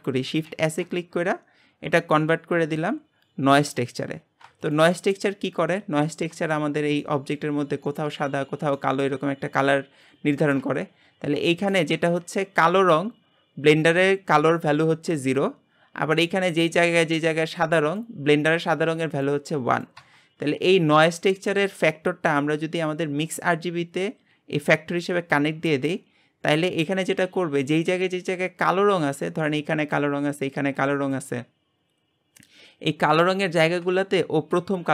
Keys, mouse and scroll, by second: 4.6 ctrl+shift+click, 6.5-7.5 shift+middle drag, 7.5-7.9 scroll up 2, 7.9-9.3 shift+middle drag, 9.3-10.3 scroll up 1, 10.3 shift+middle click, 10.7-11.4 scroll up 1, 11.4-25.7 shift+middle drag, 26.8-34.9 drag.